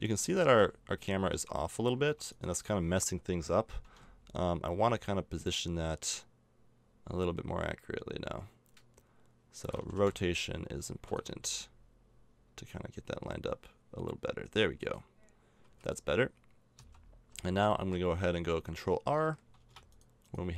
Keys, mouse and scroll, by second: 0.0 a, 1.4 middle click, 2.0 Tab, 2.3-5.2 right drag, 3.8 g, 9.8 r, 11.3 g, 15.6 a, 16.3 middle click, 16.8 z, 17.3 z, 19.9 right click, 20.4 Tab.